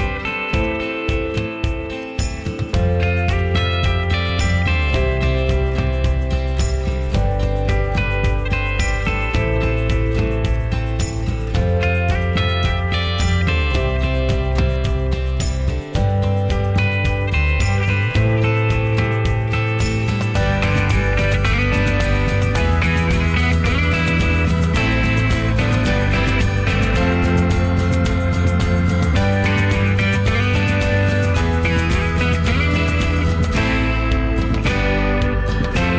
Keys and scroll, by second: 15.3-16.2 typing.